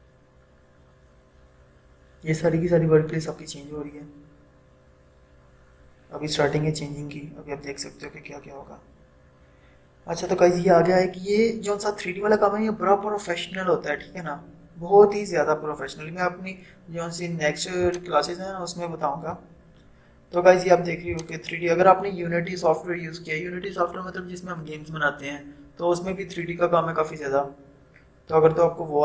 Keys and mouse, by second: 16.1 =, 17.9-29.0 drag.